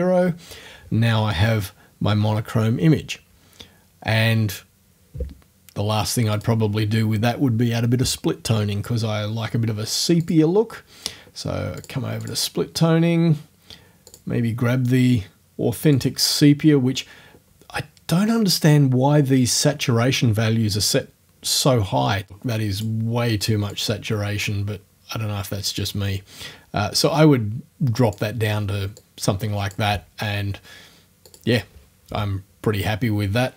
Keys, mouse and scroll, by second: 6.4 click, 6.6-8.6 middle drag, 10.3 click, 11.8 click, 12.3 click, 14.1 click, 16.0 click, 22.3 click, 23.7-28.3 drag, 29.0 click, 31.3 click, 31.5-33.2 scroll up 1, 33.2 scroll up 1.